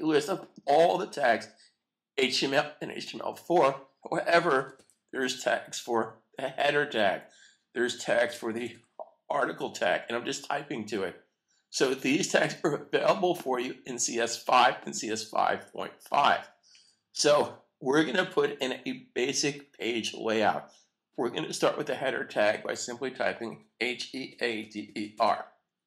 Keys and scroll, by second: 5.6 typing, 9.4-10.2 typing, 25.5 typing.